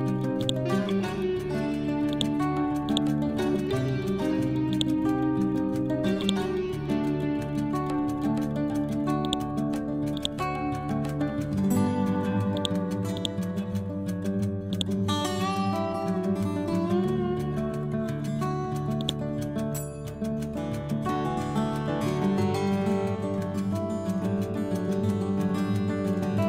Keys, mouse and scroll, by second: 0.3 shift+click, 1.2-1.6 typing, 2.0-6.1 drag, 6.8-7.3 scroll down 1, 7.4 scroll up 1, 9.1 click, 10.8 ctrl+z, 11.6 ctrl+End, 12.5 click, 13.8 ctrl+End, 14.6 click, 15.0 scroll up 1, 16.3 scroll down 1, 18.9-20.3 drag, 20.3 Down.